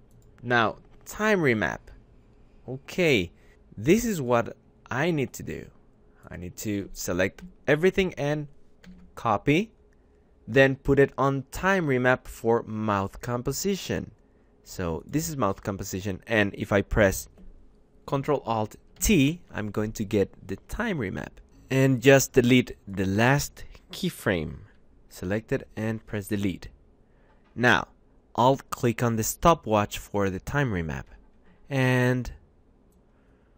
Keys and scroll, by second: 7.9 ctrl+c, 18.7 ctrl+alt+t, 19.4 F9, 20.1 F9, 24.5 Delete.